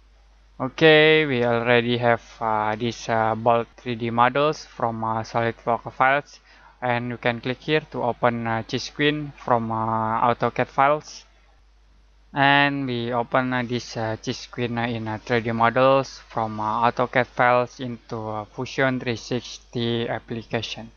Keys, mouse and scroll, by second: 1.2-2.0 scroll down 1, 2.0-3.5 scroll up 1, 3.5 middle click, 7.5 click, 14.8-15.1 scroll down 1, 15.1 scroll up 1, 16.5 middle click.